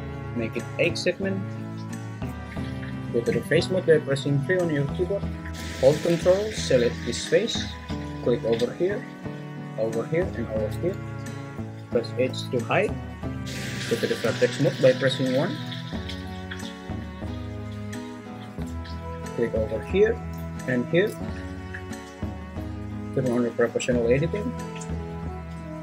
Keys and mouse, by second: 0.0 click, 3.3 3, 12.3 h, 15.4 1, 24.2 click.